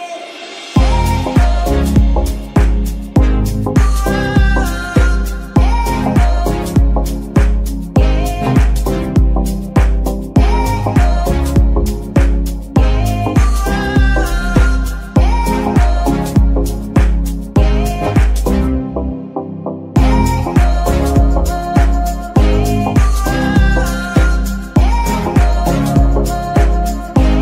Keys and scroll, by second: 0.0 g, 2.4 Escape, 2.8 g, 4.8 g, 6.2 Escape, 11.8 g, 12.6 Escape, 13.8 g, 14.5 Escape, 20.6 g, 21.3 Escape, 21.9 g, 22.7 Escape, 23.3 g, 24.0 Escape.